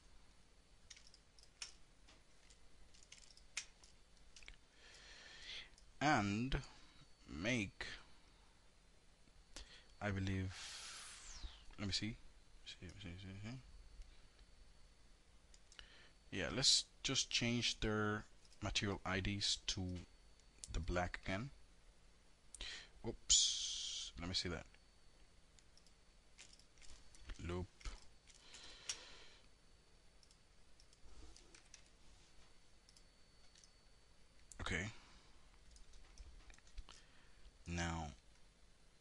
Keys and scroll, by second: 26.4 alt+l, 30.6 KP_Enter.